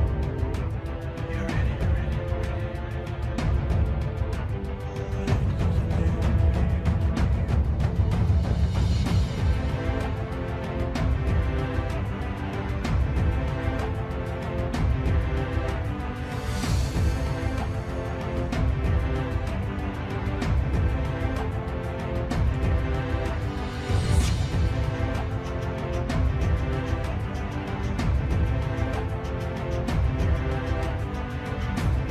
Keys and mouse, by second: 0.0 i, 5.8 s, 11.0 KP_3, 12.4 e, 14.8 shift+r, 15.5 shift+r, 17.1 shift+middle click, 19.2 shift+r, 20.0 middle click, 23.4 click, 25.3 KP_3, 26.8 i, 30.0 KP_7.